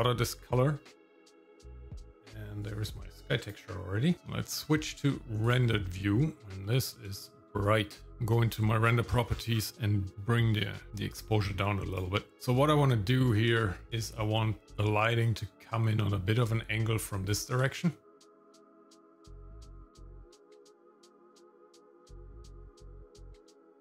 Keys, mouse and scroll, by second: 0.2-4.1 drag, 4.1 shift+middle click, 4.1-5.7 scroll down 3, 5.7 click, 6.6 middle click, 7.1 shift+middle click, 8.8-10.5 scroll down 9, 10.1-12.0 drag, 12.3 shift+middle click, 12.3 scroll up 2, 13.6 shift+middle click, 13.9 click, 15.2-17.4 drag, 17.7 shift+middle click, 18.6 middle click, 19.7 click, 20.9 click, 22.2 shift+middle click, 23.6 click.